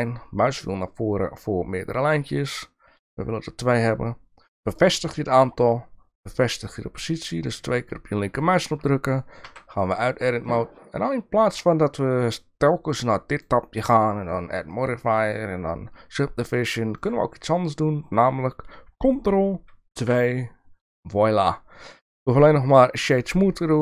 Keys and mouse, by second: 8.7 shift+middle click, 9.4 Tab, 9.9 middle click, 13.3 click, 16.8 click, 20.0 ctrl+2, 22.1 right click.